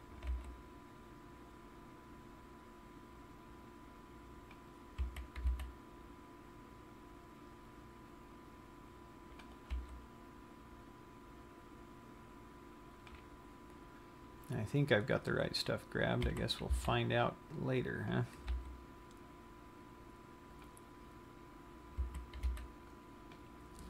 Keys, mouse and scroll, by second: 0.7 g, 5.1 click, 5.7 a, 5.9 c, 10.3 g, 13.5 click, 14.2 scroll down 1, 15.7-16.7 scroll up 5, 17.1 a, 17.2 c, 18.9 g, 21.1 click, 21.6 scroll down 1, 22.5 a, 23.1 c.